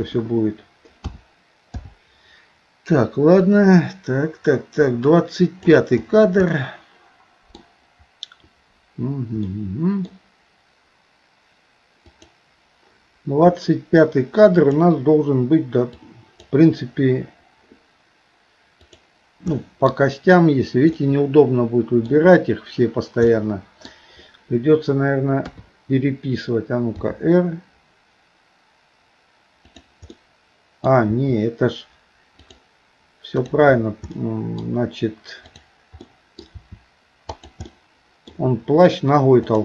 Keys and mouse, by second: 0.0 KP_1, 1.1 a, 1.8 i, 3.5-5.8 drag, 6.5-7.6 middle drag, 9.5 middle click, 12.1 click, 14.6 click, 16.1 click, 18.9 click, 19.6 middle click, 21.0-22.1 middle drag, 23.3 middle click, 25.4 KP_3, 27.0 r, 30.1 middle click, 31.1 r, 34.1 middle click, 35.4 click, 36.1 middle click, 36.6 r, 37.7 middle click, 39.4 click.